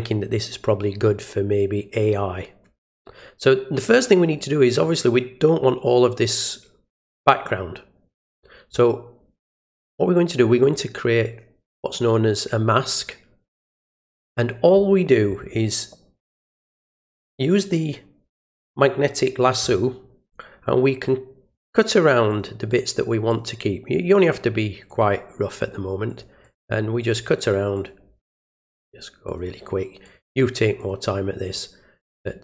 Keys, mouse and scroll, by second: 10.6 click, 16.9 click, 21.5 click, 22.2 click, 22.6 alt+click, 23.2 alt+click, 24.2 alt+click, 24.8 alt+click, 25.5 alt+click, 26.0 alt+click, 26.4 click, 26.9 alt+click, 27.3 alt+click, 27.7 alt+click, 29.2 alt+click, 30.0 alt+click, 30.7 alt+click, 31.4 alt+click, 31.9 click.